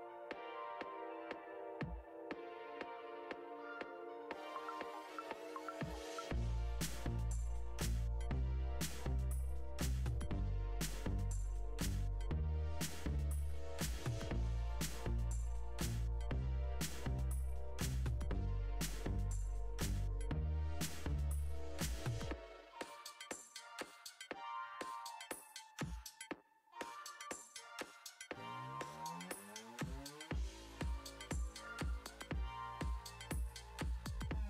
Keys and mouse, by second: 0.8 click, 3.6 middle click, 5.5 middle click, 14.9-16.3 drag, 18.7 click, 21.2 click, 23.3-24.8 drag, 30.8 /.